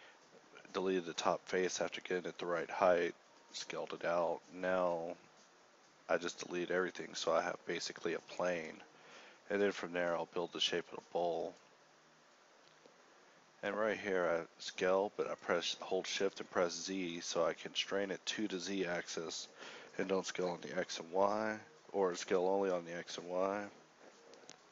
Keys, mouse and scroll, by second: 0.9 ctrl+z, 0.9 s, 1.3 ctrl+t, 2.1 alt+e, 2.7 ctrl+n, 3.5 x, 4.9 alt+s, 6.3 e, 6.3 s, 7.3 e, 7.8 ctrl+n, 10.5 Tab, 10.5 ctrl+r, 12.5 Tab, 12.5 KP_1, 13.5 s, 13.5 ., 15.6 a, 20.4 shift+m, 22.4 Tab, 22.4 ctrl+t, 23.1 x, 23.9 h, 24.3 l.